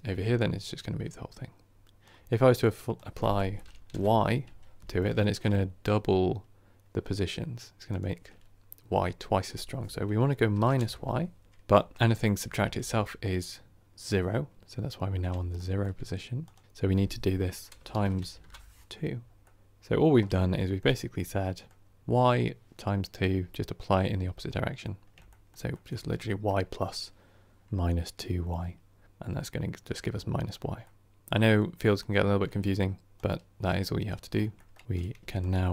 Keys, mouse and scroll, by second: 4.9 scroll down 1, 5.1-10.7 shift+middle drag, 10.7-11.4 drag, 11.4 middle click, 11.6 KP_1, 12.3 KP_3, 12.4 KP_1, 12.8 KP_3, 14.2-14.5 scroll up 5, 14.5-15.4 scroll down 1, 15.4-18.3 shift+middle drag, 18.3-19.4 drag, 19.4-30.5 middle drag, 30.5 scroll down 1, 30.7-35.7 middle drag.